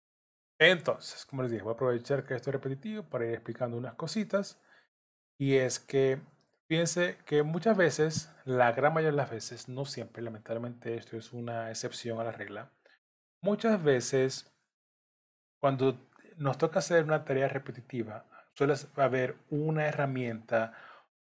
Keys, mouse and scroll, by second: 0.6 scroll down 1, 1.6 middle click, 3.1 shift+click, 6.5 middle click, 8.8 shift+click, 9.9 middle click, 12.6-13.1 scroll up 2, 13.1 middle click, 14.5 shift+middle click, 16.3 shift+click, 17.3 shift+click, 20.3 middle click.